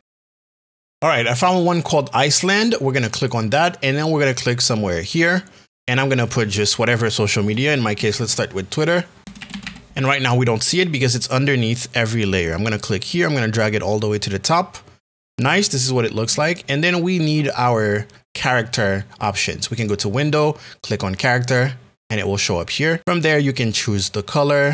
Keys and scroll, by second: 7.9 shift+l, 9.2 p.